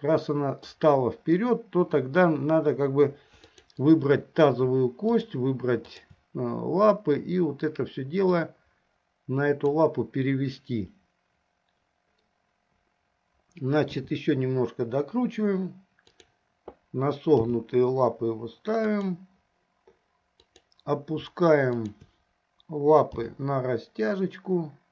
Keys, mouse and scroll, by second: 3.5 click, 5.2 shift+click, 6.0-6.3 shift+drag, 8.4-10.1 drag, 14.0 r, 17.6 g, 22.0 shift+click, 23.4 g.